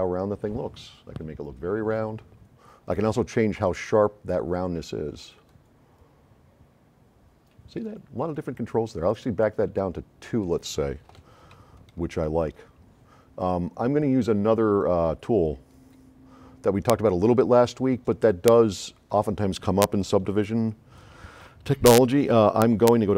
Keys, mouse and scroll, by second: 2.0-2.9 drag, 3.8-4.1 drag, 10.4 click, 11.6 s, 11.9-13.4 right drag, 17.9-19.3 right drag, 19.9 scroll up 1, 19.9 middle click, 21.0-21.6 drag.